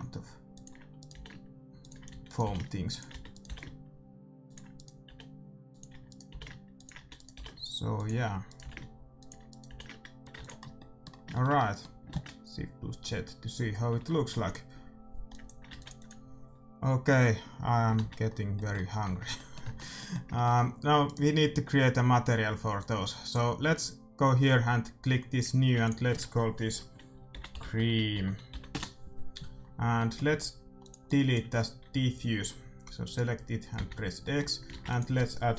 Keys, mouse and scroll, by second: 0.2 g, 1.3-3.6 typing, 5.1-7.4 typing, 8.8 g, 9.8 g, 10.3 ctrl+s, 10.3 a, 10.3 r, 10.7 middle click, 13.3 shift+z, 15.4-18.0 drag, 15.8 ctrl+s, 18.0 shift+z, 18.2-22.3 middle drag, 19.0 Tab, 19.6 Tab, 21.3-22.8 right drag, 22.8-24.6 drag, 25.3-27.6 drag, 30.8-32.8 drag, 30.8-32.7 middle drag, 33.0-34.9 right drag, 33.7 x, 34.1-35.5 middle drag, 34.7 shift+a.